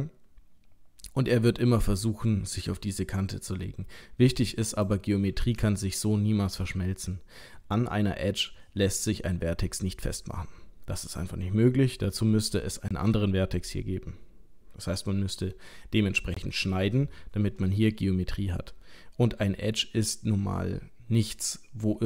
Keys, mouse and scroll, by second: 5.8 shift+middle click.